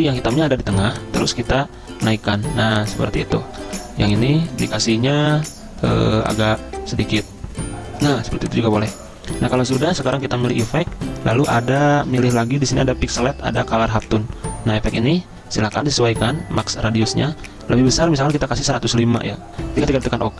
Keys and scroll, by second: 0.0 g, 3.7 ctrl+z, 18.1-19.1 typing.